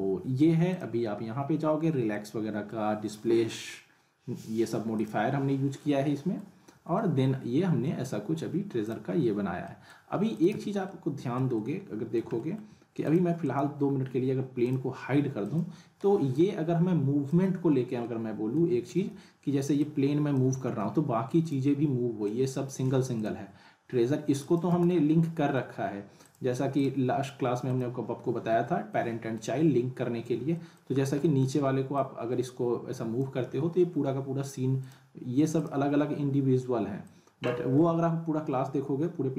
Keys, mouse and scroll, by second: 0.7 click, 2.1-2.7 middle click, 3.0-4.7 scroll up 1, 5.0 click, 5.8-6.4 alt+middle click, 6.7 scroll up 1, 6.9-8.2 alt+middle drag, 8.2-8.8 scroll down 1, 8.8 click, 9.1 scroll up 1, 9.6 middle click, 10.3 click, 10.5 z, 10.8-11.4 alt+middle drag, 13.0-17.6 drag, 18.0-18.6 middle click, 18.9 ctrl+z, 19.8-20.4 click, 20.7 z, 21.4 click, 22.9 ctrl+z, 23.1 click, 23.5 scroll up 1, 25.0 middle click, 26.1 middle click, 26.2 click, 28.3 z, 28.9-29.5 middle click, 29.5-30.3 scroll down 1, 30.5 alt+middle click, 31.0 scroll down 1, 31.2 alt+middle click, 32.3-33.2 drag, 33.5 z, 34.1-34.8 scroll down 1, 34.8 click, 37.3 ctrl+drag, 37.8 ctrl+z.